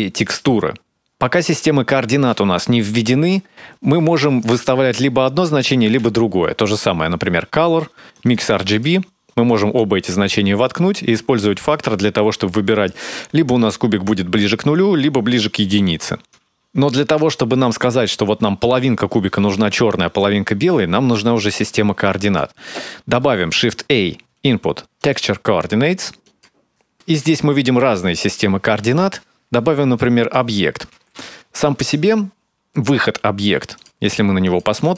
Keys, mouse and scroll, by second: 7.0 shift+a, 10.4 click, 11.7 click, 18.1 middle click, 19.0 middle click, 21.4 middle click, 22.3 click, 23.0 click, 24.2 shift+a, 34.8 ctrl+shift+click.